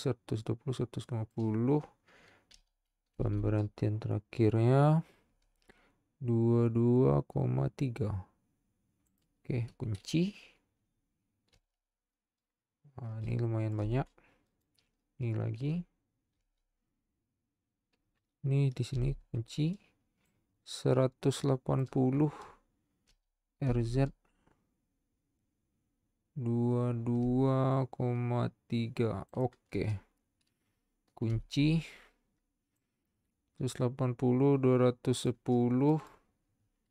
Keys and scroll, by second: 2.7 r, 3.1 z, 11.5 i, 16.5 i, 19.1 i, 23.3 r, 23.7 z, 31.3 i.